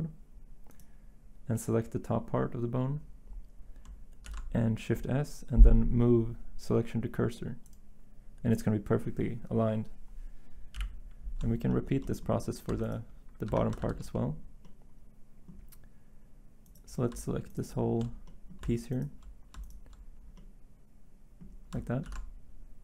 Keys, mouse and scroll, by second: 8.8 s, 10.7 1, 12.7 Tab, 13.5 Tab, 13.8 z, 22.1 s.